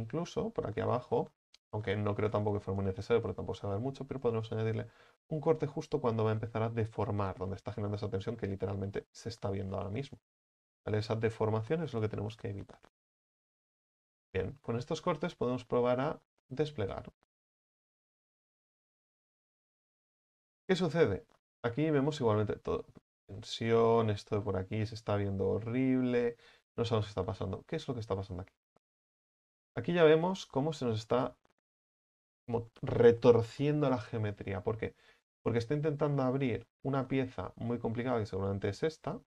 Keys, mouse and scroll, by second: 1.0 scroll up 6, 2.3 right click, 2.7-3.6 scroll up 4, 4.2 alt+shift+right click, 4.5 alt+shift+right click, 4.9 scroll down 3, 5.3-8.1 shift+middle drag, 8.1-8.4 scroll up 2, 8.4-8.9 middle drag, 8.9-9.3 scroll down 1, 9.3-13.4 shift+middle drag, 13.4 u, 13.7-14.3 scroll down 9, 14.3 middle click, 14.7-15.2 scroll down 5, 15.2-15.5 scroll up 1, 15.5 a, 15.9 a, 16.4 scroll up 3, 19.3 u, 21.0-21.4 scroll down 3, 21.4-23.2 shift+middle drag, 23.2-23.7 scroll up 5, 23.7 right click, 24.5-26.2 middle drag, 26.2-26.6 scroll down 3, 26.6 a, 26.7 a, 26.9 a, 30.3-35.3 right drag, 35.3-35.7 middle drag, 35.7-36.2 scroll down 3, 36.2-37.7 shift+middle drag, 37.7 scroll up 4, 38.4 right click, 39.1-39.2 middle drag.